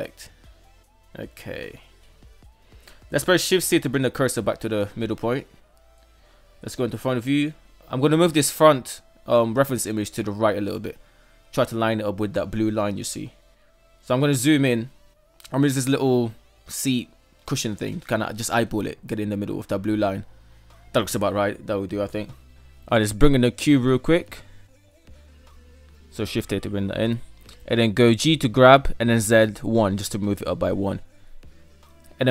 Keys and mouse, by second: 2.8 shift+c, 4.9 shift+middle click, 5.6 KP_1, 10.6 g, 16.4 g, 20.5 shift+middle drag, 21.5 shift+middle click, 22.2 shift+a, 26.8 g, 32.1 ctrl+a.